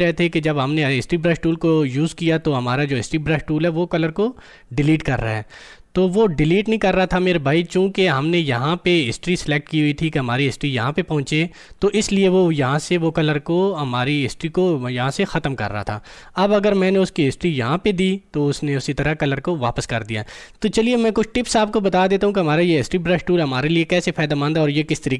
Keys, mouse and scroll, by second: 10.9 click, 17.3 click.